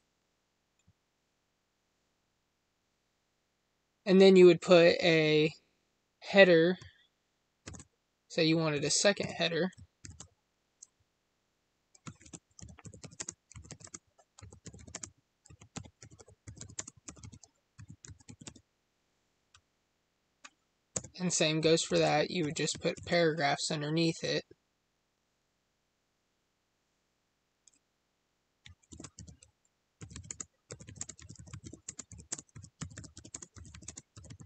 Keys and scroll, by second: 13.1 space, 13.8 space, 14.9 space, 16.7 space, 30.2 space, 30.9 space, 31.8 space, 32.2 space, 33.2 space, 33.8 space.